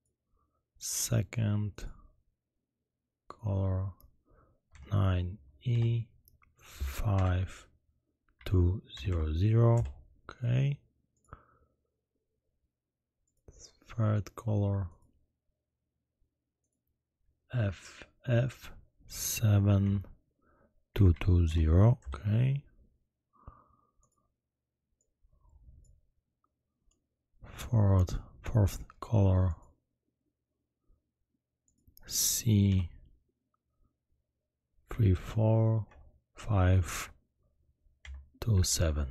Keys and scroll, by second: 5.7 e, 7.1 5, 8.3 2, 8.9 0, 9.1 0, 9.7 Return, 18.3 f, 19.8 7, 20.9 2, 21.1 2, 21.4 0, 22.0 Return, 34.9 3, 35.8 4, 38.0 5, 38.4 2, 38.6 7.